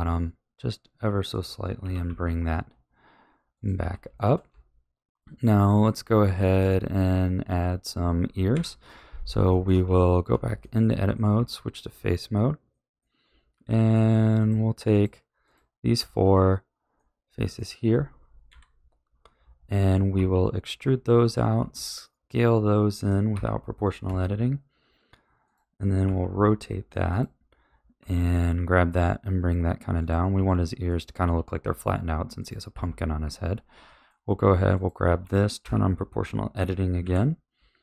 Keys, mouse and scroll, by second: 1.8 g, 3.8 a, 4.1-4.5 shift+middle drag, 4.5 Tab, 5.8-6.3 middle drag, 6.3 z, 7.6-8.5 scroll down 3, 8.5 KP_1, 9.4-9.8 shift+middle drag, 9.8 Tab, 10.6-11.3 middle drag, 11.3 3, 11.8-12.7 scroll up 4, 12.7-13.2 middle drag, 13.2-13.7 scroll down 1, 13.7-14.3 middle drag, 14.3 click, 14.8 shift+click, 15.4 shift+click, 15.9 shift+click, 16.9-18.4 middle drag, 18.4 KP_1, 20.1 e, 21.5 s, 23.3 o, 24.0 s, 26.0 r, 27.9 g, 30.3 r, 31.2 s, 32.7 a, 33.2 1, 33.8-34.7 middle drag, 34.7 click, 35.6 o, 36.9 KP_1.